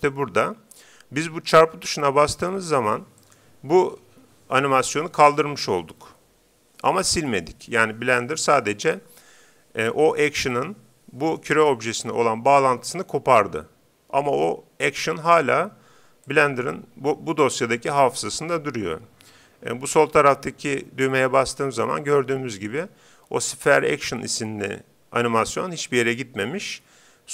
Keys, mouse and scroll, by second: 3.2-4.8 drag, 16.3-18.0 drag.